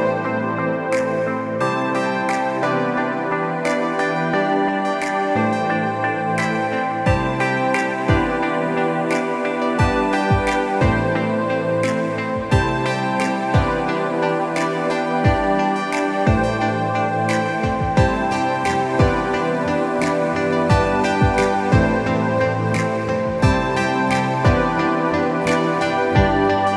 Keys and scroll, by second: 3.6 space, 6.8 i, 12.7 ctrl+Return, 13.9 space, 14.8 i, 16.5 space, 16.8 b, 17.0 space, 19.5 ctrl+alt+z, 21.1 ctrl+alt+z, 24.6 space, 25.4 space.